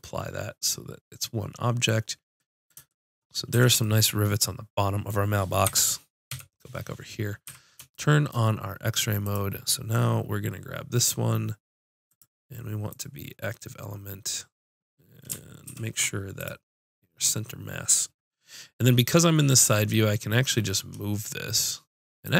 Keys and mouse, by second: 3.5 a, 5.6 KP_1, 6.2 KP_5, 7.5 z, 9.2 click, 16.5 ctrl+alt+shift+c, 19.6 g.